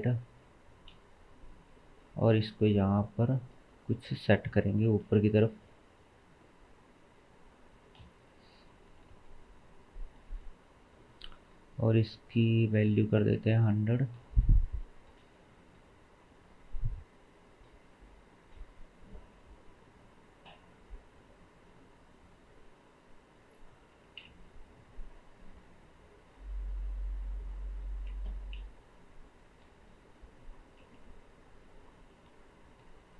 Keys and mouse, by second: 0.9 KP_7, 2.1 g, 3.5-7.0 middle drag, 4.0 KP_1, 5.1 g, 8.0 KP_7, 9.1 g, 11.3-12.1 drag, 14.6 click, 14.8-19.3 shift+right drag, 19.3 click, 19.5 g, 20.2-21.3 middle drag, 21.3-30.8 right drag, 30.8 KP_1, 32.1 KP_7.